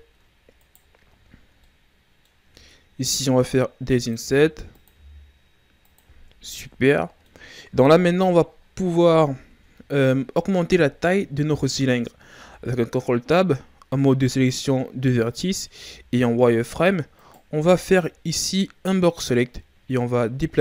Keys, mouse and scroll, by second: 0.6 right click, 1.1-1.6 shift+scroll up 5, 1.6-3.3 middle drag, 3.3 i, 4.1 i, 4.8 i, 6.2-6.9 scroll down 2, 6.5 Tab, 6.9 middle click, 7.8 KP_1, 8.6 ctrl+scroll up 3, 9.0 Tab, 9.7-11.0 shift+scroll up 3, 11.0-12.3 scroll up 4, 12.3 ctrl+Tab, 15.7 z, 17.1 right click, 17.5 b, 19.5-19.8 scroll down 1, 19.8-20.6 shift+scroll up 2.